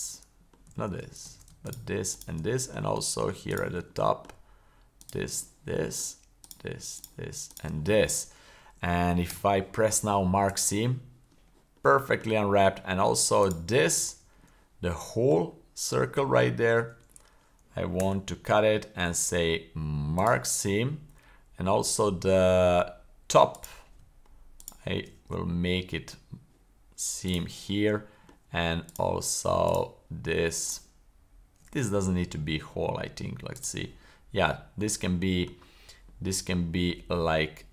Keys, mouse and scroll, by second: 0.1-0.4 middle drag, 0.7 super+z, 1.3 super+z, 1.6 shift+right click, 2.5 middle click, 3.5 alt+shift+right click, 3.9-4.3 middle drag, 5.0 shift+right click, 5.4-6.0 middle drag, 6.4 shift+right click, 7.0-7.6 shift+right drag, 7.9-8.9 middle drag, 9.3 w, 11.9-12.2 shift+middle drag, 12.4-12.9 scroll up 1, 13.4 alt+right click, 14.4 alt+middle click, 15.5-16.2 middle drag, 16.4 shift+middle click, 18.0 w, 23.5 right click, 24.6 shift+right click, 25.2 w, 28.0 middle click, 28.9 alt+right click, 29.6 shift+right click, 30.6 alt+shift+right click, 31.8 w, 34.4-35.4 middle drag, 36.1-37.7 middle drag.